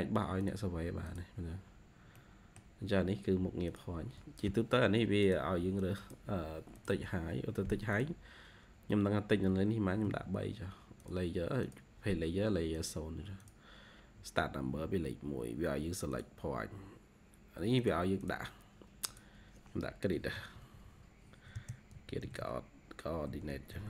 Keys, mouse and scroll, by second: 1.7-2.1 scroll up 1, 2.1 middle click, 9.9 typing, 14.6 typing, 18.1 double click, 19.8-23.8 typing.